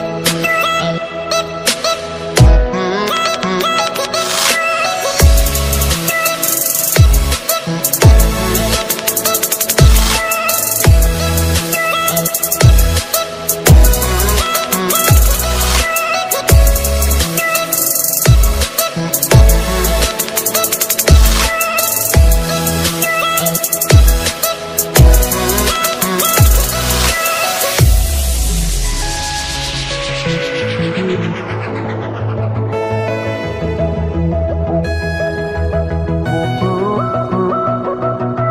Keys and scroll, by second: 29.4 ctrl+space.